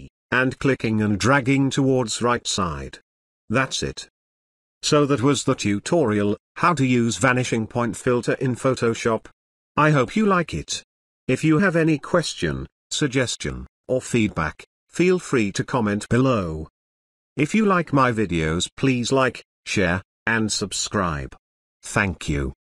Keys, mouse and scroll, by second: 3.6-4.5 alt+click, 4.6 ctrl+z, 9.2 click, 14.3 space, 14.5-15.1 ctrl+drag, 16.5 ctrl+z, 17.5 space, 18.0-18.6 ctrl+click, 18.4 ctrl+click, 18.8 ctrl+z, 18.9 ctrl+space, 19.3-20.8 ctrl+click, 20.1-22.8 ctrl+drag.